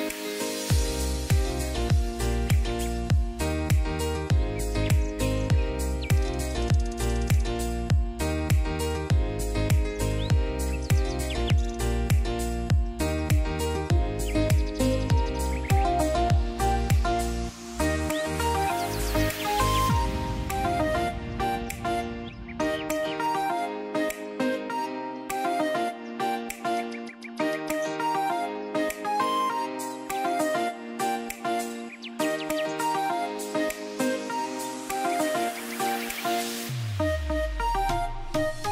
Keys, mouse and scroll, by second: 0.7 click, 6.2-8.2 drag, 17.2 alt+scroll down 1, 19.1-20.1 ctrl+click, 20.2 ctrl+z, 21.1-22.0 ctrl+drag, 28.4 right click, 30.1 click, 35.0 click.